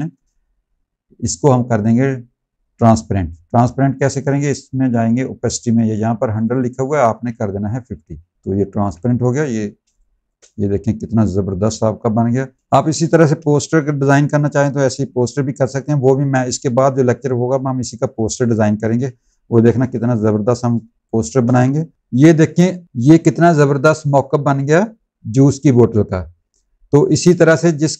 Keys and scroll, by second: 7.7 KP_5, 8.6 z, 9.7 space, 12.6 space, 13.2 v, 19.7 v, 20.7 space.